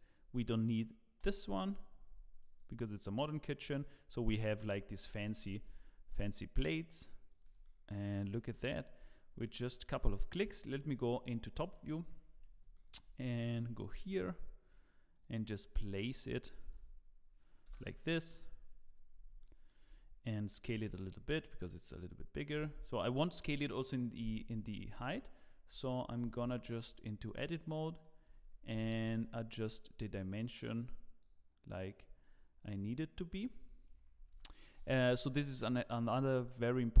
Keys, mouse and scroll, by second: 1.2 x, 3.2 click, 3.8 click, 4.4 shift+middle click, 5.2 g, 7.6 middle click, 8.5 KP_Decimal, 9.1-9.5 scroll down 5, 9.4 middle click, 10.4 KP_7, 11.5 scroll down 2, 12.0 z, 12.4 scroll down 2, 12.7 shift+middle click, 13.1 scroll up 2, 14.1 g, 15.8 r, 19.1 scroll up 3, 19.4 shift+middle click, 20.0-20.8 scroll up 1, 20.8 s, 24.8 Tab, 29.5 click, 29.5 g, 30.1 click, 34.3 click, 34.3 g, 34.6 click, 36.4 click.